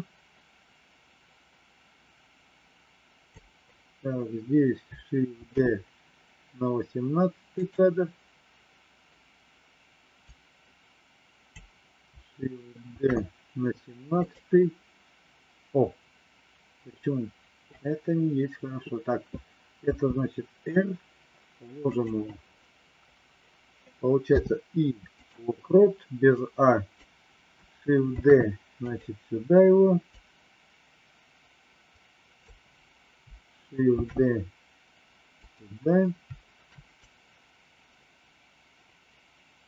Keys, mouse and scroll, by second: 5.4 shift+d, 10.2-11.5 drag, 13.0 shift+d, 19.9 r, 24.1 i, 26.2 click, 28.1 shift+d, 30.1-32.4 drag, 34.0 shift+d, 36.9-39.6 drag.